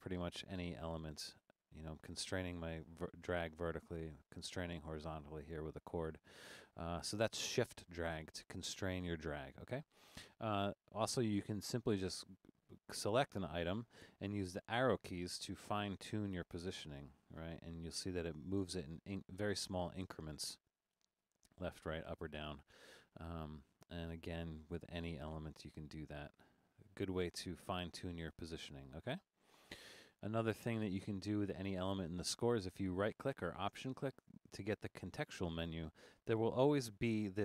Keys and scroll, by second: 14.7 Left, 15.1 Left, 15.6 Right, 16.0 Right, 16.3 Up, 17.4 Down, 17.7 Right, 18.0 Right, 18.3 Left, 18.7 Left, 19.0 Down, 19.4 Down, 19.7 Up, 20.7 Left, 21.0 Right, 21.3 Right, 21.6 Up, 21.8 Up, 22.1 Down, 22.3 Down, 25.2 Up, 25.4 Up, 25.7 Down, 25.9 Down, 27.5 Right, 27.7 Right, 27.9 Left, 28.1 Left.